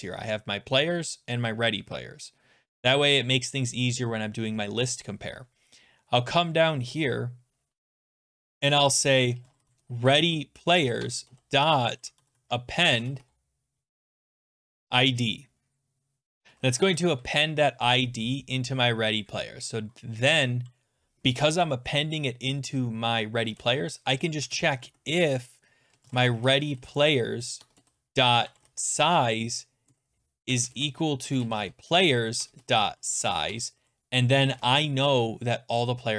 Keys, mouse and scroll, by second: 5.6-8.1 scroll, 8.1 click, 8.1 scroll, 9.1-15.1 typing, 11.0 Tab, 11.9 click, 17.1 Right, 18.2-18.6 scroll down 13, 19.4-20.0 scroll up 16, 23.2-29.1 typing, 23.4 scroll, 27.6 Tab, 30.2-34.8 typing, 32.4 Tab.